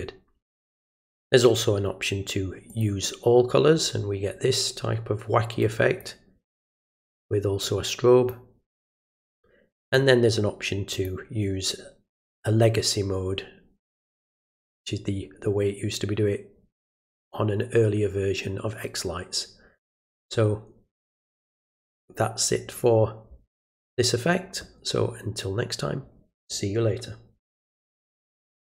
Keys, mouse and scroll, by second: 2.7 click, 5.6 click, 7.6 click, 9.8 click, 10.9 click, 13.9 click, 28.6 click.